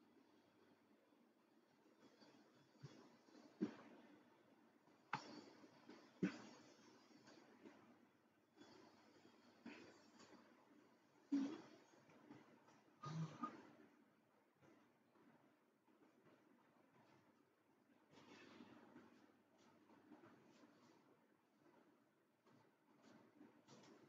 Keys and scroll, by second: 19.8 Escape.